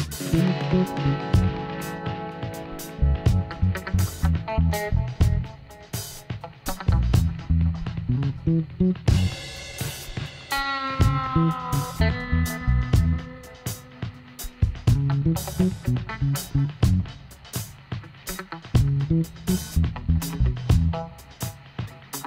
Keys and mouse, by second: 0.7-2.5 right drag, 0.9 click, 1.1 middle click, 1.9 x, 5.0-6.7 drag, 8.2 f, 8.5 middle click, 9.2 middle click, 10.5 alt+h, 13.3-18.3 middle drag, 13.5 KP_1, 18.3 click, 19.9 right click, 20.4 i, 22.1 middle click.